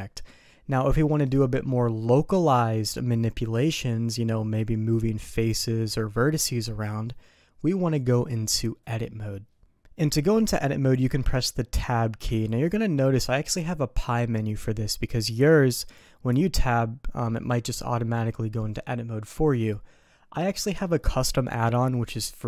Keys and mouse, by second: 10.2 middle click, 12.2 Tab.